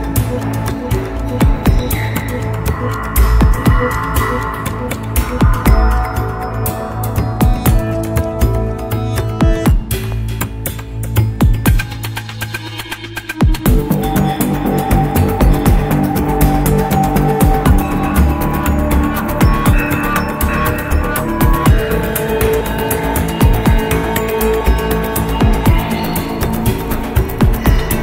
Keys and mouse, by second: 0.6 shift+click, 1.1 middle click, 2.9 ctrl+click, 3.6 middle click, 5.4 ctrl+click, 6.4 middle click, 7.3 KP_1, 10.0 e, 12.9-14.2 middle drag, 15.0 KP_1, 18.5 k, 26.5-27.6 middle drag.